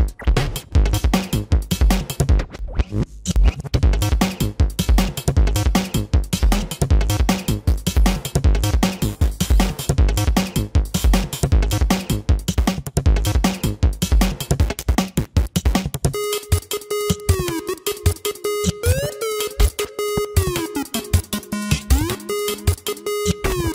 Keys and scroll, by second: 2.5 ctrl+-, 2.8 ctrl+-, 6.6 ctrl+-, 7.6 space, 8.6 ctrl+alt+z, 9.3 ctrl+alt+z, 10.4 ctrl+alt+z, 11.2 ctrl+alt+z, 14.8 ctrl+=.